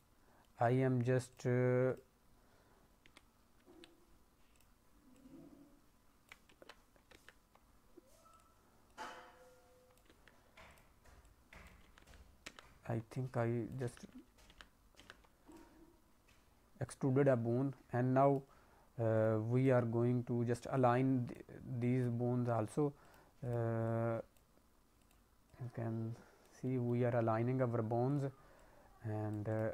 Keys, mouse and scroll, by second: 0.4 middle click, 1.8 click, 3.0 e, 4.5 click, 5.1 click, 6.4 z, 7.1 ctrl+z, 7.5 scroll down 2, 8.8 click, 10.0 ctrl+z, 10.6 click, 11.2 click, 11.8 ctrl+z, 12.0 ctrl+z, 12.4 ctrl+z, 13.1 click, 13.8 ctrl+z, 14.0 ctrl+z, 14.5 ctrl+z, 14.9 ctrl+z, 15.5 click, 16.9 click, 18.5-19.1 scroll down 2, 19.1 click, 19.5 click, 20.7 click, 21.7 click, 22.9 click, 23.3 click, 23.7 click, 24.9 click, 25.5 click, 26.6 middle click, 27.3-28.0 scroll down 1, 28.0 click, 28.5 click, 29.4 click.